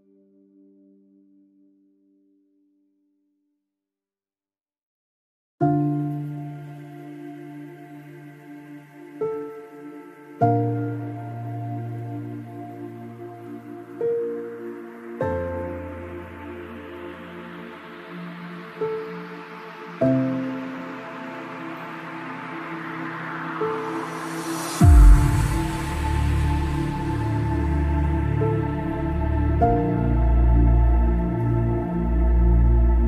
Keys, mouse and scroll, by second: 1.0-2.8 right drag, 1.1 b, 1.5 g, 3.9 middle click, 4.1 b, 4.4-5.5 drag, 4.5 g, 5.5 right click, 8.6-11.7 middle drag, 12.1 ctrl+r, 13.2 ctrl+r, 15.1-16.1 middle drag, 18.4 ctrl+r, 22.2-23.9 right drag, 23.7 k.